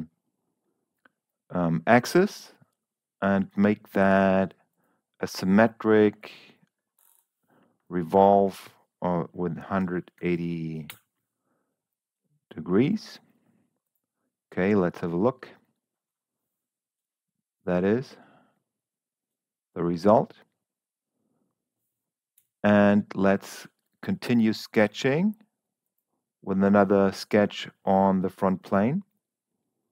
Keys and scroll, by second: 8.6 1, 9.7 8, 10.1 0, 10.8 Return, 22.7 s.